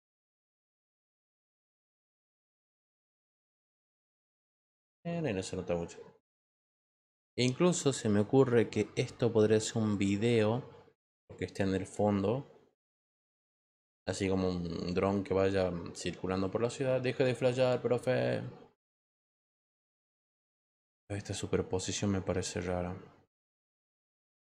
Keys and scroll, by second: 2.7 Return.